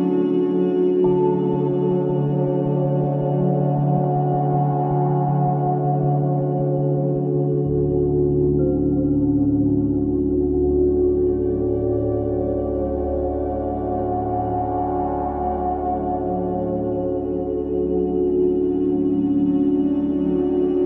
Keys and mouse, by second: 1.7 Delete, 3.0 Escape, 3.5-5.3 drag, 5.3 Tab, 5.7 click, 9.6-12.6 alt+drag, 13.2 shift+click, 13.6-14.7 shift+drag, 16.0 click, 16.9 click, 18.4 click, 20.1-20.8 shift+drag.